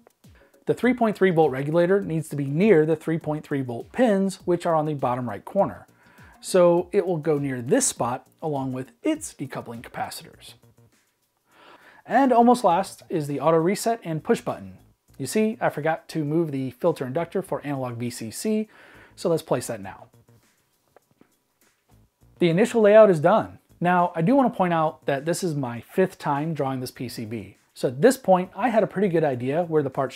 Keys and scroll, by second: 0.0 m, 0.3 r, 0.5 Escape, 1.7-2.9 typing, 5.6-6.4 typing, 10.3 m, 11.0 r, 12.2 m, 13.3 r, 14.2 m, 18.2-20.8 typing.